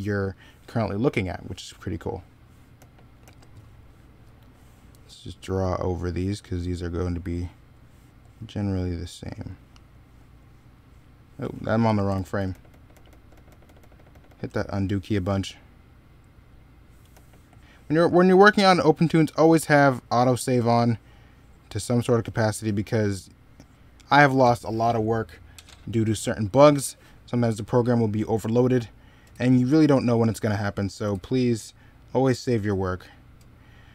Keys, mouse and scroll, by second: 1.6 middle click, 2.6 e, 3.1 b, 12.0 ctrl+z, 16.9 e.